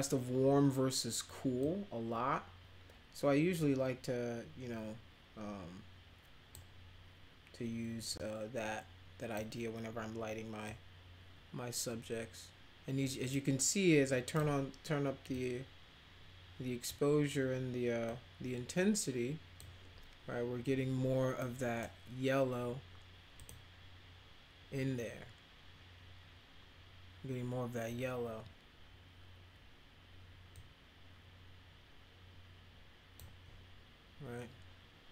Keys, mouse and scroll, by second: 1.7-6.5 drag, 8.1-9.4 drag, 10.7-14.3 drag, 13.4-14.3 right drag, 15.4-16.9 drag, 18.1-19.6 drag, 21.4 right click, 23.4 click, 30.5-33.1 drag.